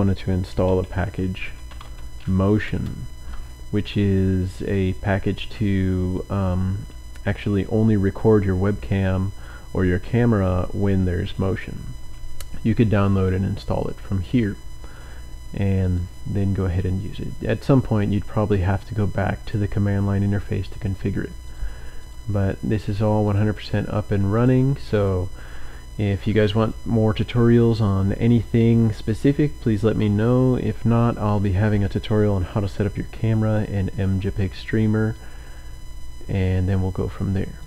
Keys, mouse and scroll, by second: 0.5-4.0 typing, 15.8 click, 16.2 click, 16.3-18.2 scroll up 2, 18.4-19.1 scroll up 1, 19.2-19.6 scroll down 1, 21.4 click, 22.0 click, 23.2 click, 24.4-24.7 scroll down 1, 25.0 click.